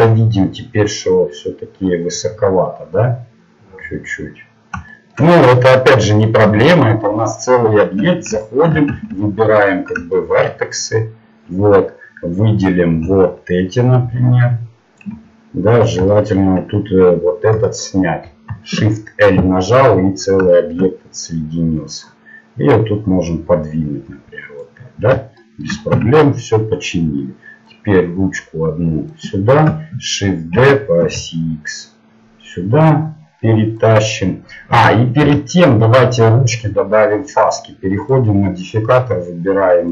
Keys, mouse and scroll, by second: 2.5-4.9 drag, 4.9-6.1 middle drag, 6.1-7.1 right drag, 8.0 Tab, 9.8 ctrl+Tab, 14.5 middle click, 15.0 click, 15.3 middle click, 18.2 shift+l, 19.3-22.1 middle drag, 22.1-24.5 drag, 24.9-26.6 middle drag, 25.9 Tab, 27.7-29.0 drag, 27.7-28.7 right drag, 30.5 shift+d, 35.2 ctrl+z.